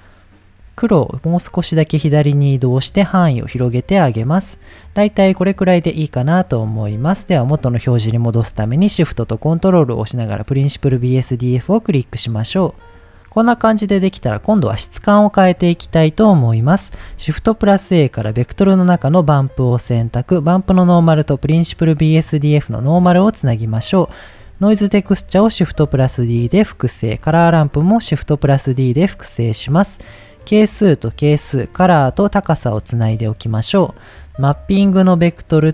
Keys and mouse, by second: 0.8 click, 3.2-4.2 middle drag, 5.0-6.0 middle drag, 7.5 middle click, 11.3 click, 11.6 middle click, 12.3 middle click, 12.8 middle click, 13.8 middle click, 14.4 middle click, 15.6 middle click, 16.9 shift+a, 20.4-21.5 drag, 22.8 middle click, 24.6 click, 25.4 shift+d, 26.1 click, 27.0 click, 27.3 shift+d, 28.1 drag, 28.5 click, 29.3 middle click, 30.2-31.3 drag, 32.1-32.9 drag, 33.8 middle click, 34.2-34.7 drag, 35.0-35.5 drag.